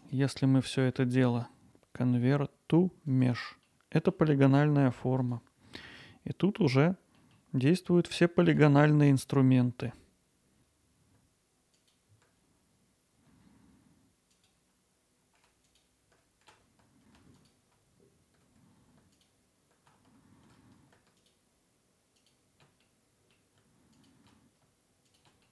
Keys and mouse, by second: 0.9 Tab, 1.7-4.1 right drag, 4.5 Tab, 5.3 click, 6.1 alt+middle click, 7.3 middle click, 9.2 alt+click, 10.1 alt+middle click, 11.0 alt+click, 11.9 shift+click, 14.0 alt+shift+click, 15.6 alt+e, 17.0 2, 18.5 alt+shift+click, 19.2 alt+middle click, 19.4 alt+shift+click, 19.9 alt+middle click, 20.5 alt+shift+click, 21.6 ctrl+b, 24.1 alt+middle click, 24.4 middle click, 24.6 Tab.